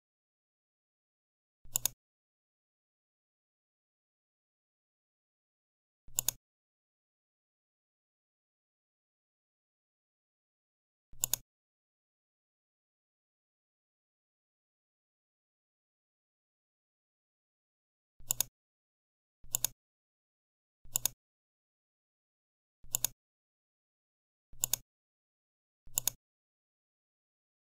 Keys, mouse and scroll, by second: 1.2 right click, 6.0 click, 9.3 ctrl+d, 11.1 click, 18.2 click, 19.4 click, 20.8 right click, 22.8 click, 24.5 click, 25.8 click.